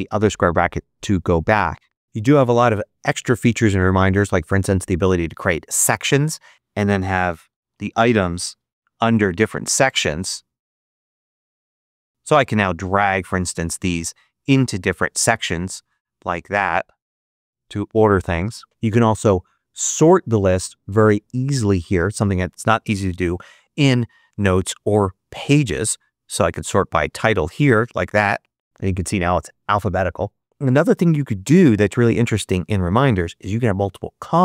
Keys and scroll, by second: 6.7-8.4 typing, 10.7-12.5 typing.